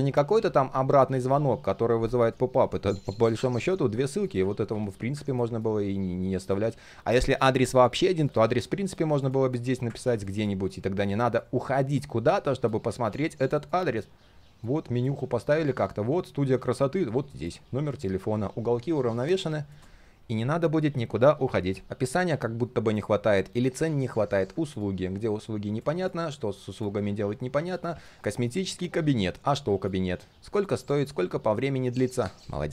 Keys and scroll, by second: 8.2 ctrl+a, 8.5 ctrl+v.